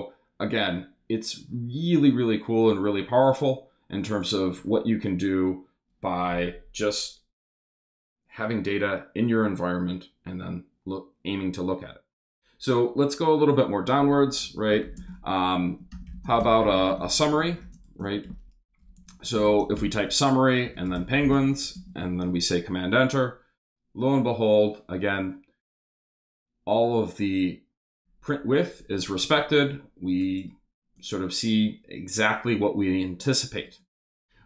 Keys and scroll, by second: 14.4 Return, 14.8-21.8 typing.